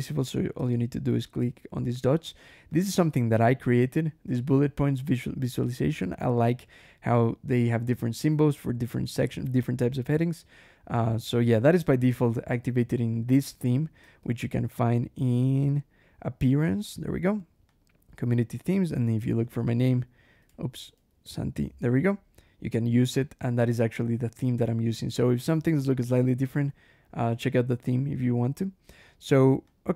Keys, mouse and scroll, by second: 0.0 click, 0.5 click, 1.1 scroll down 1, 2.1 click, 2.6 click, 3.2-3.5 scroll up 1, 4.8 scroll up 1, 9.6-11.5 scroll down 5, 11.5 scroll up 1, 12.6-13.0 scroll up 1, 14.0 ctrl+,, 16.7 click, 17.6 click, 18.6 click, 18.6-19.9 typing, 20.4 ctrl+a, 20.7 ctrl+s, 20.8 ctrl+a, 20.9 ctrl+n, 21.1 ctrl+t, 21.2 ctrl+i, 23.6 click, 24.5 scroll up 1, 25.3 scroll up 1, 26.0 scroll up 1, 29.5 click.